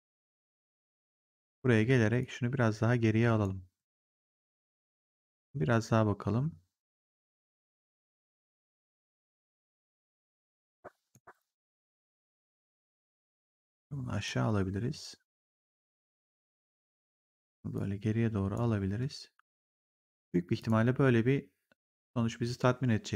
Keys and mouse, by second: 1.2 click, 1.6 w, 2.1 click, 6.7 click, 8.3 click, 9.5 click, 12.5 click, 13.5 click, 15.5 click, 17.6 click, 20.0 right click, 20.5 click.